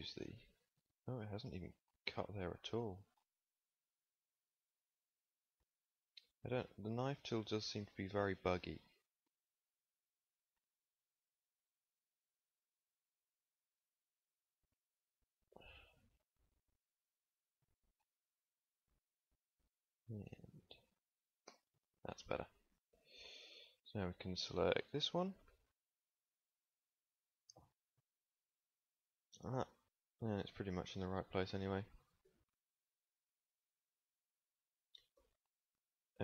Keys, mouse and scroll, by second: 4.1 KP_1, 10.5 k, 17.0 click, 21.4 shift+j, 22.9 KP_1, 25.4 a, 26.1 z, 26.9 b, 31.4 g, 35.1 z.